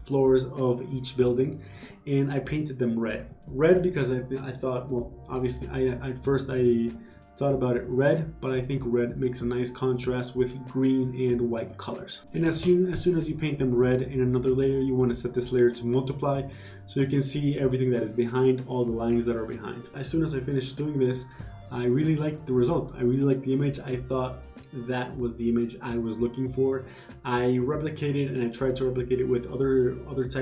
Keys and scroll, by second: 0.5 g, 5.3 ctrl+d, 5.6 v, 10.9 w, 23.3-25.1 typing, 25.1 ctrl+d, 26.2 w, 29.3-30.4 typing.